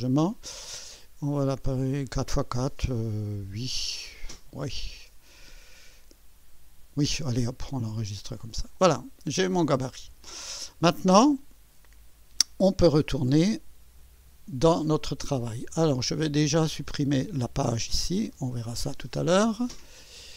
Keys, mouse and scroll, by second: 8.0 click, 14.0 click, 16.8 click, 18.0 Delete, 20.0 click.